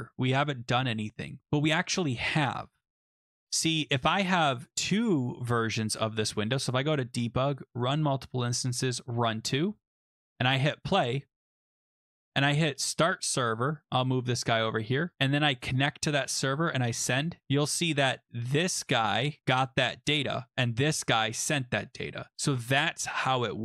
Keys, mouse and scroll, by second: 5.7 click, 6.7 click, 7.8 click, 8.9 click, 10.7 click, 11.8 click, 12.2 click, 13.1 click, 14.4 click, 15.1 click, 15.8 click, 16.9 click, 20.1 click, 21.4 click, 22.6 click.